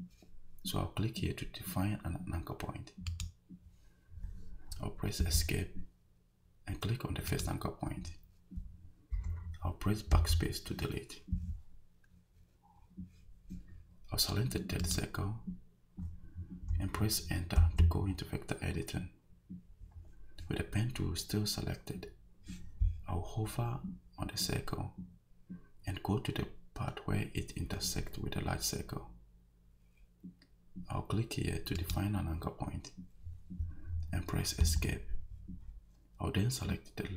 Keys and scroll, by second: 5.2 Escape, 10.1 BackSpace, 17.6 Return, 34.6 Escape.